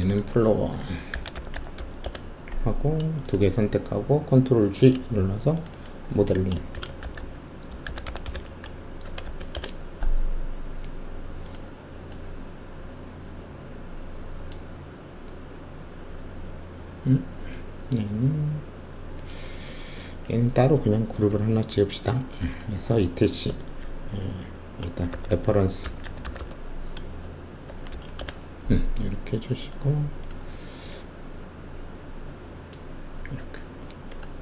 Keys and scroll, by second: 0.6-1.7 typing, 2.0 Return, 4.6 ctrl+shift+g, 6.7-9.2 typing, 9.5 Return, 21.2 ctrl+g, 25.1-26.3 typing, 27.6 shift+-, 27.9 shift+g, 28.1 Return.